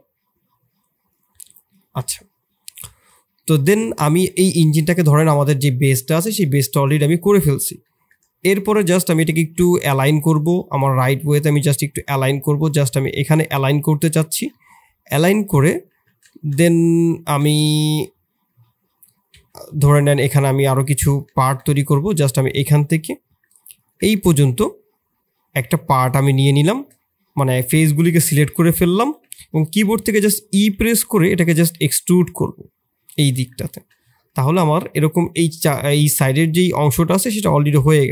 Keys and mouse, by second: 3.0 drag, 3.3-4.4 middle drag, 4.9 KP_3, 6.6 KP_1, 8.2 KP_1, 9.3 g, 10.9 g, 14.2 shift+click, 14.5-15.4 middle drag, 15.8 Tab, 16.2 shift+click, 17.4 ctrl+r, 20.4 4, 21.8 3, 22.6 middle click, 23.7 ctrl+click, 24.1-26.5 middle drag, 27.2 KP_3, 29.2 ctrl+KP_1, 29.7 shift+click, 37.0 s.